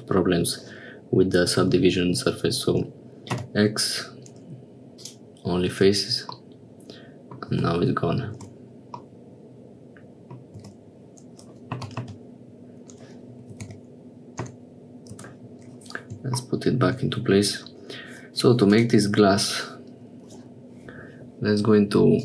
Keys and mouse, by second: 3.4 x, 6.5 middle click, 7.7 Tab, 8.4 Tab, 9.1-10.5 middle drag, 11.9 g, 18.4 click, 18.8 click.